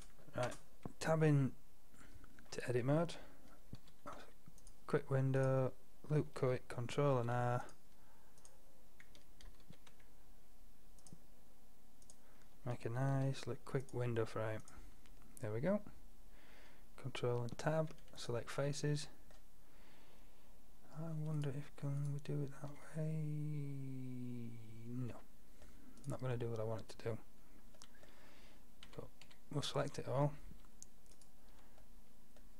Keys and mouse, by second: 0.6 Tab, 3.8 ctrl+r, 7.2 ctrl+r, 9.7 ctrl+r, 13.2 ctrl+r, 17.5 ctrl+Tab, 19.3-20.8 drag, 21.4-23.1 drag, 23.1-23.7 middle drag, 23.7 drag, 23.9 middle drag, 24.5 middle click, 26.0-28.1 middle drag, 28.9 a, 29.3 a, 31.2-32.5 middle drag.